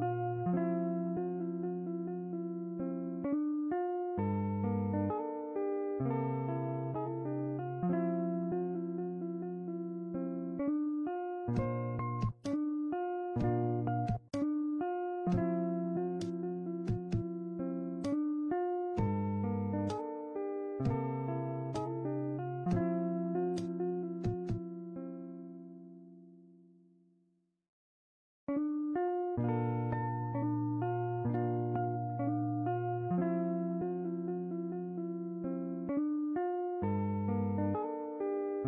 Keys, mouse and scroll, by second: 1.0 shift+middle click, 2.4 shift+middle click, 3.1-6.5 drag, 6.5 a, 8.5 u, 11.5 click, 13.2 a, 14.3-15.2 drag, 22.0-25.1 drag, 25.1 shift+middle click, 27.6 click, 28.1 click, 28.2 ctrl+z, 28.4-32.5 typing, 28.7 click, 29.2 click, 29.4 click, 29.9 click, 30.4 click, 31.3 click, 31.6 click, 31.9 click, 32.1 click, 36.4 click, 37.4-38.5 drag.